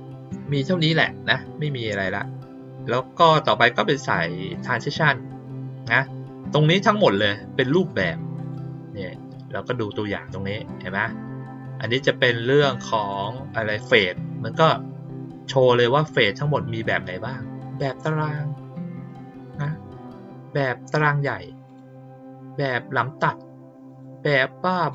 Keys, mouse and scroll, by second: 7.0 click, 7.8 click, 8.4 click, 13.0 click, 16.1 click, 19.4 click, 21.6 click, 23.8 click, 24.8 click.